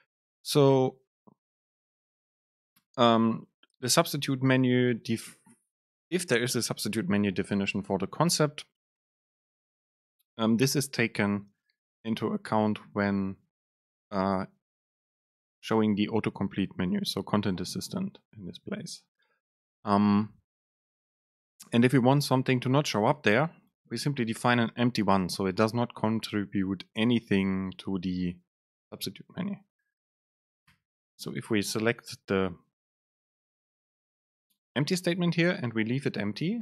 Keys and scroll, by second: 23.5 super+space.